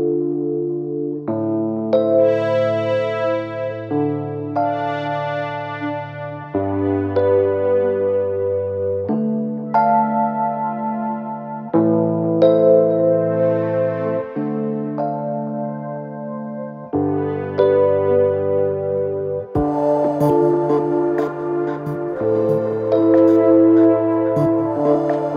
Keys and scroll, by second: 0.0 4, 5.0 l, 5.4 Return, 10.0 3, 10.3 ctrl+F1.